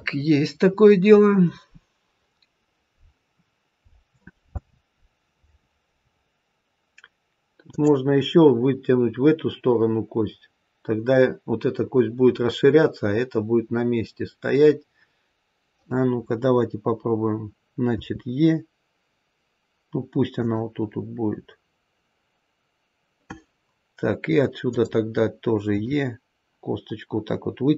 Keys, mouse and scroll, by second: 3.3-6.4 scroll up 2, 7.6 click, 14.0-14.9 scroll down 1, 17.8 e, 24.6 click, 25.7 e.